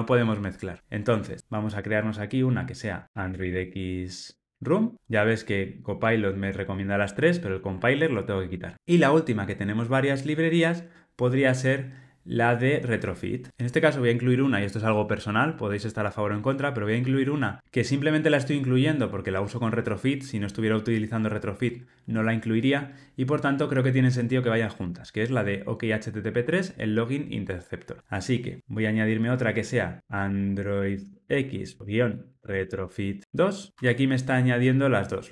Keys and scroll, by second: 5.9 Tab, 8.3 super+BackSpace, 33.7 Tab.